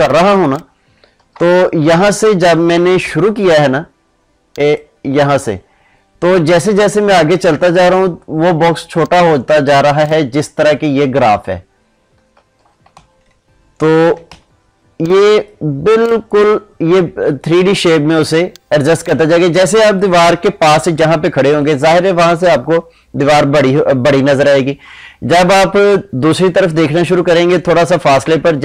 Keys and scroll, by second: 1.1 ctrl+z, 12.3 ctrl+z, 14.3 ctrl+space.